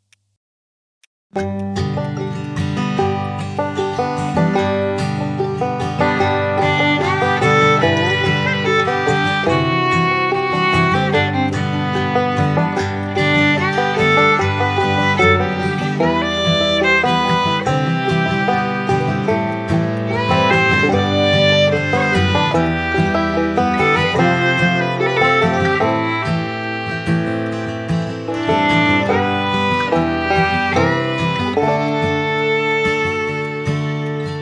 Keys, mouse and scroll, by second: 8.7 ctrl+click, 14.3 shift+click, 18.3 shift+click, 22.0 right click, 25.4 shift+click, 31.8 ctrl+click, 32.4 shift+click.